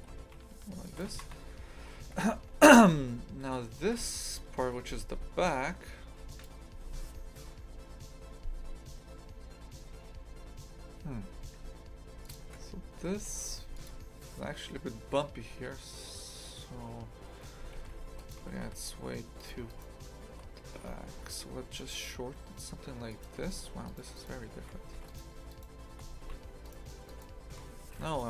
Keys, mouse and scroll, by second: 0.0 g, 1.1 shift+f, 12.3 click, 12.4 shift+f, 18.6 a, 19.4 alt+shift+right click, 19.7-20.8 alt+shift+right drag, 20.8 g, 23.8 alt+shift+right click, 24.1 alt+shift+right click, 24.8 a, 25.1 alt+shift+right click, 25.5 alt+shift+right click, 26.1 a, 26.6 alt+shift+right click, 27.1 alt+shift+right click, 27.8 a, 28.0-28.2 alt+shift+right drag.